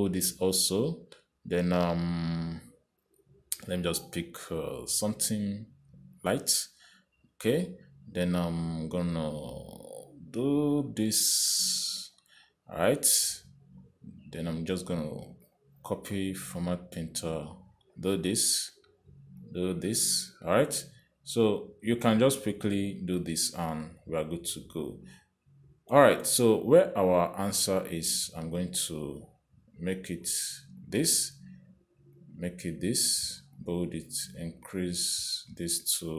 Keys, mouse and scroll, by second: 1.3 click, 3.3 click, 7.4 click, 10.4 click, 13.3 click, 16.5 click, 16.7 click, 18.4 click, 20.7 click, 22.3 click, 27.0 Escape, 28.7 click, 30.2 click, 32.1 click, 33.6 click, 34.8 click, 35.7 click, 35.9 click.